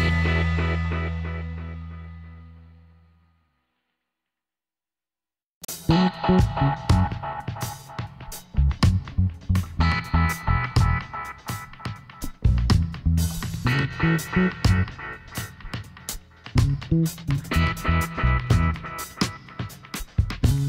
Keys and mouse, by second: 1.1-2.9 middle drag, 3.3-5.0 drag, 4.2-5.8 right drag, 5.6 KP_Decimal, 6.3-7.7 middle drag, 6.5 KP_1, 10.1-12.3 middle drag, 10.9-12.6 drag, 13.7 e, 15.1 s, 17.6 Tab, 17.8-20.2 middle drag.